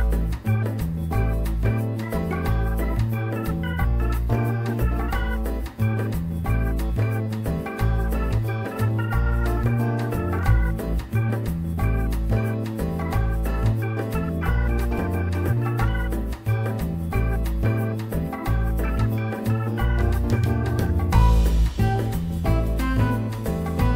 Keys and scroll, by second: 8.1 ctrl+z, 17.3 F4, 22.5 w.